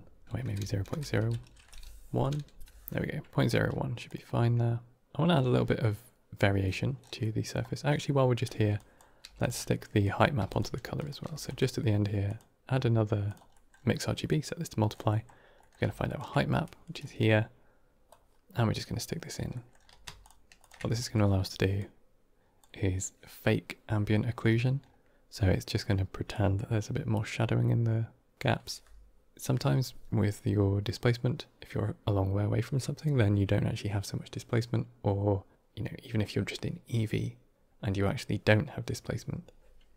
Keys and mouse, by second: 0.2-1.4 drag, 2.1 click, 4.0-5.0 drag, 7.1-7.4 middle drag, 8.0 middle click, 8.6 click, 9.1 g, 9.9 drag, 10.3 g, 10.8 click, 11.2 shift+d, 12.2-13.2 drag, 13.4 middle click, 15.0 middle click, 15.5 middle click, 16.0 ctrl+shift+click, 16.9 middle click, 17.9-19.2 drag, 19.4 middle click, 20.1 ctrl+shift+click, 20.5 ctrl+shift+click, 20.8 middle click, 21.7-22.5 drag, 26.2-28.3 drag.